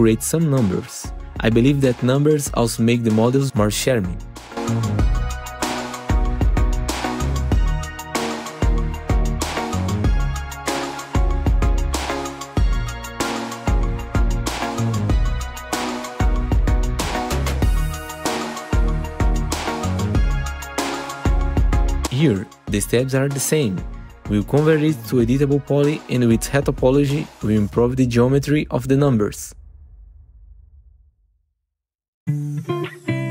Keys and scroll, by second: 4.6 2, 6.6 shift+/, 8.2 shift+/, 9.0 1, 9.9 4, 19.2 Down, 21.1 Down, 24.0 ctrl+t, 27.4 F4, 30.4 BackSpace, 30.5 Return, 30.6 BackSpace, 30.9 1, 31.5 Return.